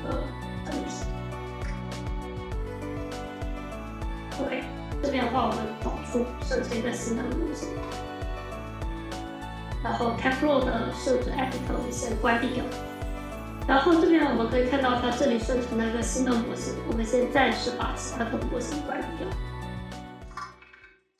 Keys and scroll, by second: 20.5 F4.